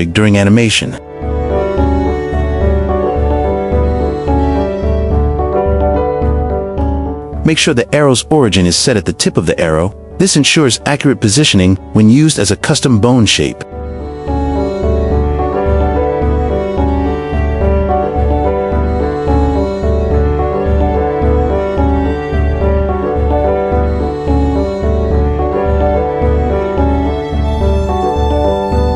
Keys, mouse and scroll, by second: 0.6 click, 1.7 click, 2.6 click, 3.0-4.1 drag, 5.6 shift+middle click, 6.3 Tab, 6.6 Tab, 7.0 shift+middle click, 7.9 click, 9.1 shift+s, 10.8 Tab, 10.8-13.2 right drag, 15.0 Tab, 15.3 shift+middle click, 15.9 shift+middle click, 16.8 click, 17.2 click, 20.0-20.3 drag, 20.7 click, 23.3 h, 24.2 ctrl+z, 24.6 q, 25.3 shift+middle drag, 26.3 g.